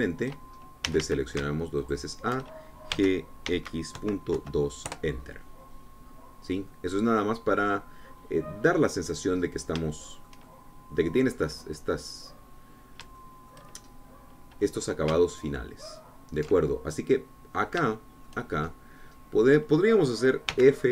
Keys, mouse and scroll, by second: 0.7-2.4 shift+middle drag, 1.9 a, 2.8 alt+shift+click, 3.9 g, 4.5 x, 5.0 KP_Decimal, 5.4 KP_2, 5.9 KP_Enter, 7.1-7.7 scroll down 2, 7.7-10.3 drag, 10.4-10.8 scroll up 2, 10.9-12.2 shift+drag, 13.8-14.2 scroll down 3, 14.2 shift+click, 14.9 shift+scroll up 2, 17.6 alt+shift+middle click, 18.0 click, 18.9 shift+click, 19.6 shift+scroll up 2, 20.4-20.9 scroll down 2.